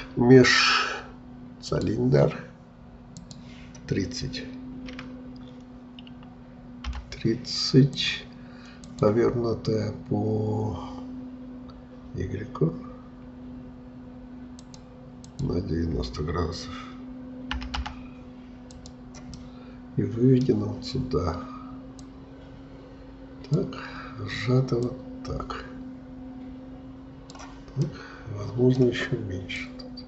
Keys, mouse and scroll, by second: 3.2-19.4 drag, 19.4-22.0 middle drag, 22.0-27.9 drag, 27.9-29.6 middle drag, 29.6-30.0 drag.